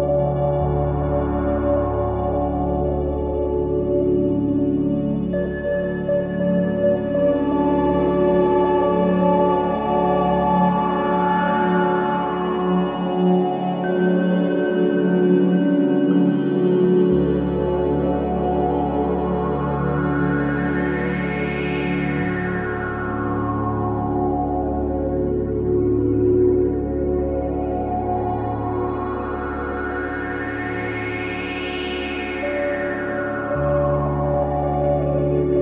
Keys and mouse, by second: 5.3 click, 6.2-9.2 drag, 9.6-20.2 drag, 21.1-22.1 drag, 23.1 click, 24.1 click, 25.6 right click, 32.1 shift+d.